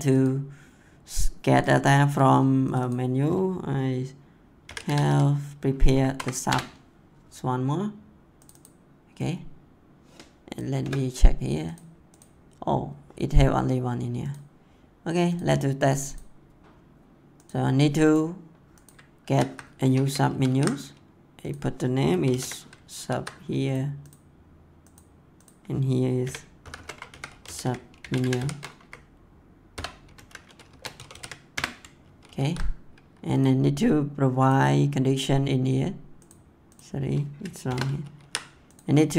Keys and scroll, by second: 4.3-5.3 typing, 6.1 Down, 6.4 Return, 10.7 BackSpace, 19.2 ctrl+c, 19.8 Return, 20.0 ctrl+v, 22.1 s, 22.9 ctrl+s, 26.2-28.6 typing, 28.8 Right, 29.7-31.4 typing, 31.5 Return, 32.0 ctrl+s, 37.6 shift+., 37.9 ctrl+s.